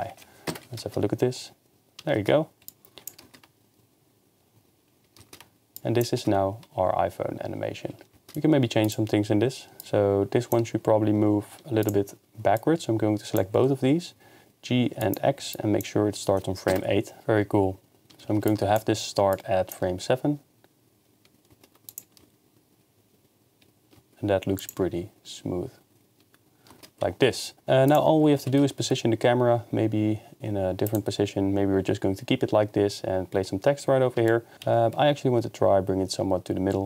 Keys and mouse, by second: 0.0-0.8 typing, 9.8 click, 11.8 shift+click, 12.6 click, 12.8 click, 13.8 g, 15.5 click, 16.7 KP_0, 17.2 shift+space, 18.5-19.5 drag, 21.9 click, 24.6 click, 27.9 click, 28.4 g, 28.6 x, 30.9-31.4 drag, 34.3 shift+middle drag, 34.5 g, 34.6 x.